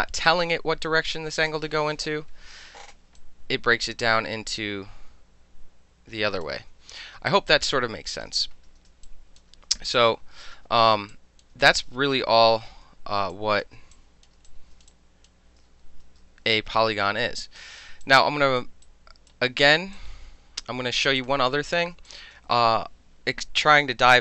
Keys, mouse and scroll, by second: 0.3-1.3 alt+drag, 3.2-6.4 alt+drag, 7.3-8.2 alt+drag, 8.5 ctrl+z, 9.5 ctrl+z, 9.8 ctrl+z, 10.1 ctrl+z, 10.5 ctrl+z, 11.1 alt+click, 11.7 ctrl+z, 12.5 ctrl+z, 13.3 alt+click, 14.0 click, 14.5 alt+click, 14.9 click, 16.0 ctrl+z, 16.6 r, 17.4-17.8 drag, 18.0-18.6 alt+drag, 18.9-19.3 right drag, 19.7 click, 20.0-21.0 alt+drag, 21.2 click, 22.1 click.